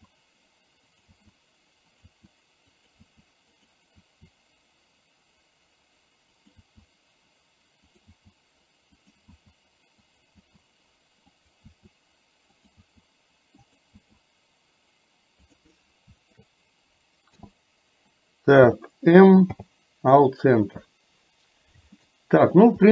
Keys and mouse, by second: 13.1 e, 16.2 shift+click, 17.4 n, 18.6 n, 19.6 m, 22.1 middle click.